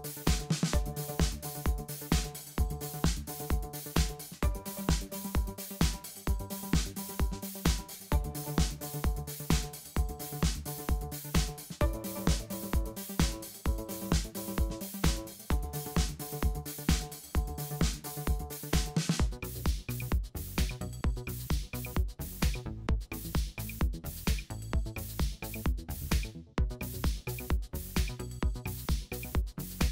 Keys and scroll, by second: 0.0-0.9 typing, 3.2 o, 6.4 BackSpace, 7.9 BackSpace, 8.7 BackSpace, 9.8 BackSpace, 10.9 BackSpace, 11.9 BackSpace, 13.7 BackSpace, 15.0-19.2 typing, 19.8 super+z, 20.8 super+0, 22.8 super+a.